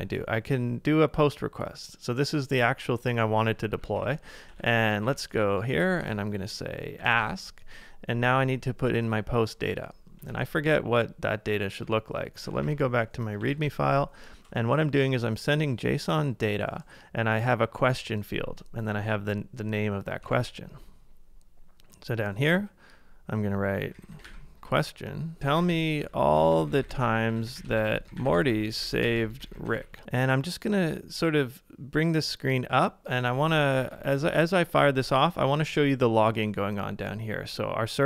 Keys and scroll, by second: 3.7 alt+Right, 3.9 alt+BackSpace, 4.6 super+z, 5.1 Right, 6.0 alt+BackSpace, 6.7-7.6 typing, 10.3 super+Tab, 12.6 ctrl+a, 13.2-14.1 typing, 20.2 super+Tab, 23.5-25.9 typing, 27.8-28.8 typing, 33.9 ctrl+a, 34.1 j, 35.0 super+Tab.